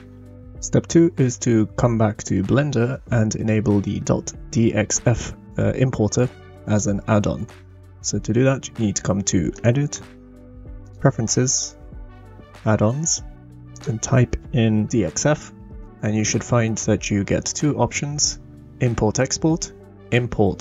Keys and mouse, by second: 9.6-11.6 drag.